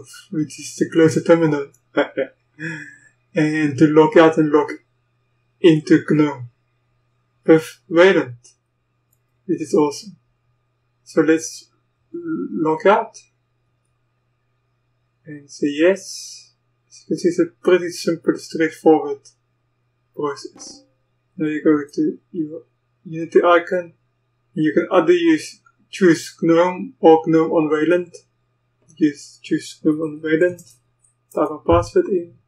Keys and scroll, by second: 30.1-31.5 typing, 31.6 Return.